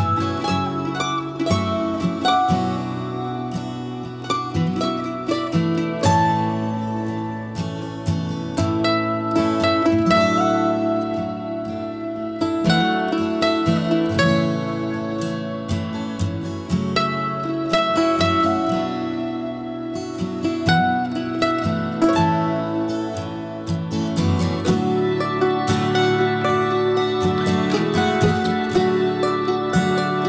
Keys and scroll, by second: 8.3 l, 9.2 Escape, 9.9-13.1 typing, 13.3 Escape, 14.0 Escape, 14.2 Escape, 14.4 Return, 14.4 Escape.